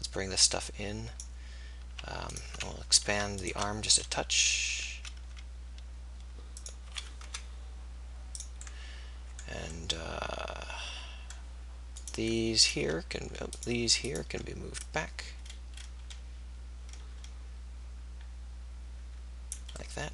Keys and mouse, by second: 3.1-10.3 drag, 4.0 s, 7.0 s, 10.5-19.6 drag.